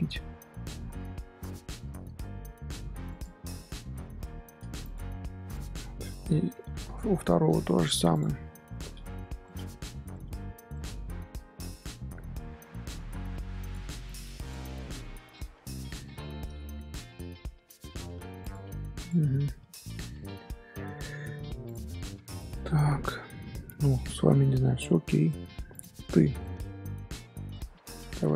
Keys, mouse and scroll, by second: 0.6 g, 5.1 scroll down 1, 5.2 scroll up 1, 5.2 scroll down 1, 5.5 click, 6.3-7.0 scroll down 10, 7.2 shift+middle click, 7.5-7.8 scroll up 3, 8.1 click, 8.4-9.2 shift+middle drag, 9.2 shift+g, 10.1-10.4 middle drag, 10.4 Tab, 10.7-11.2 middle drag, 11.2 z, 11.5 scroll up 2, 12.1 z, 12.5 scroll down 1, 12.6 middle click, 13.0 z, 13.6 click, 14.0 click, 14.4 click, 15.1 z, 15.3-16.6 middle drag, 16.6 scroll up 2, 17.4 g, 18.9 click, 19.2-19.6 scroll down 3, 19.3-19.6 middle drag, 19.7 scroll up 1, 19.8 shift+middle click, 20.3 scroll down 1, 20.4-20.8 scroll up 3, 20.8-21.6 shift+middle drag, 21.6 click, 21.8-23.8 middle drag, 23.8-24.3 scroll up 1, 24.6 Tab, 25.1 Tab, 25.2-25.7 middle drag, 25.7 click, 26.1-26.9 shift+middle drag, 26.9 Tab, 27.5 shift+middle click, 27.9 Tab.